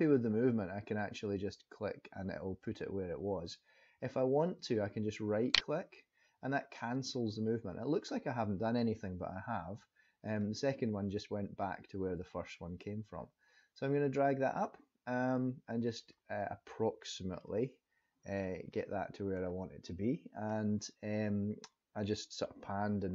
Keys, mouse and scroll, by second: 9.8 click, 14.6 middle click, 16.3-16.7 scroll up 2, 17.0 scroll down 1, 17.3 shift+middle click, 18.7 middle click.